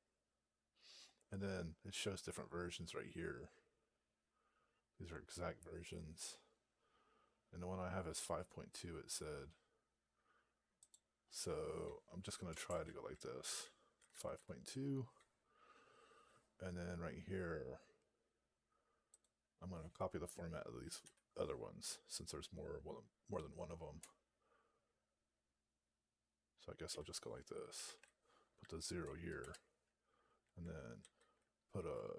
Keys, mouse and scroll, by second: 0.4-3.1 scroll up 2, 10.7 click, 12.6 :, 13.6-14.7 typing, 19.0 click, 20.9 Right, 28.9 0, 29.2 space, 30.9 alt+f.